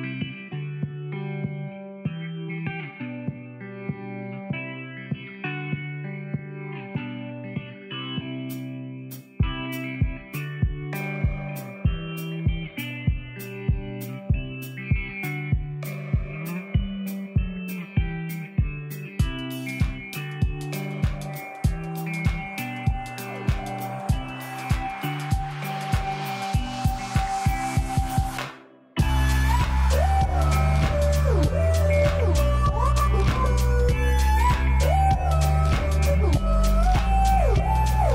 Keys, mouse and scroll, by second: 10.5 t, 13.0 right click, 14.1 click, 15.2 typing, 17.5 shift+s, 18.6 shift+t, 19.4 shift+r, 19.8 shift+e, 22.0-23.4 typing, 25.3-31.3 drag, 32.1 ctrl+t, 34.9-38.1 drag, 35.0-38.1 alt+Num_Lock.